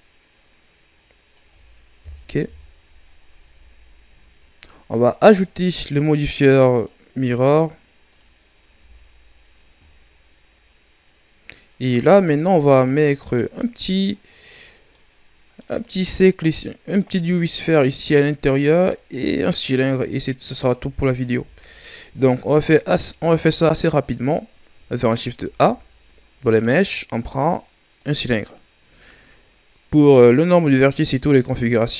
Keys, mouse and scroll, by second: 2.0 KP_1, 2.4 Tab, 3.0-5.0 ctrl+scroll down 9, 3.4 a, 5.0 scroll up 2, 5.4-6.7 right drag, 6.7-8.7 drag, 8.7 a, 9.0-11.9 scroll down 5, 11.9-13.3 ctrl+scroll up 9, 13.3 middle click, 14.2-14.9 scroll up 3, 14.9-20.2 middle drag, 21.3 KP_1, 22.2-22.8 scroll down 1, 22.8-25.3 ctrl+scroll down 4, 25.3 shift+a.